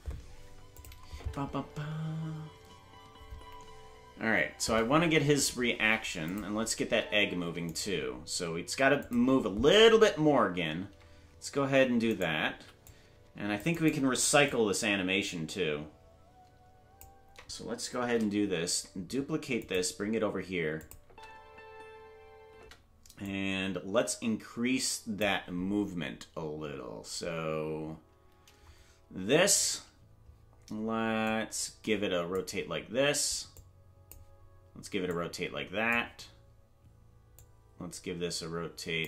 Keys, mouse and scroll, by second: 0.7 click, 1.1 space, 4.7 space, 6.3 click, 6.8 space, 7.4 space, 7.8 right click, 9.0 click, 12.1 right click, 12.5 c, 14.5-17.0 drag, 18.0 shift+d, 20.8 click, 21.0 space, 23.0 space, 23.2-25.2 drag, 31.2-32.3 drag, 33.5 click, 35.0 click, 37.4-39.0 drag.